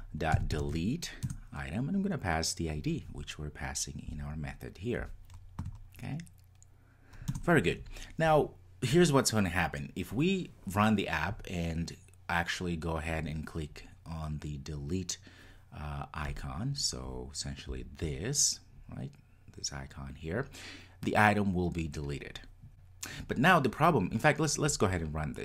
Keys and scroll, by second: 1.3 Return.